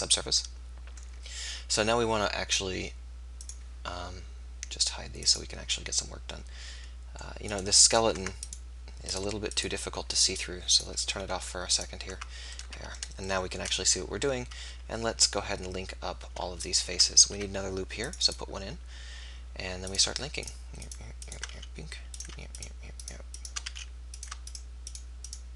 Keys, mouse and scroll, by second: 3.5-6.9 drag, 7.4 click, 8.2 Tab, 12.0 click, 12.0 right click, 12.2 Tab, 17.3 ctrl+r, 21.5 f, 23.6 f.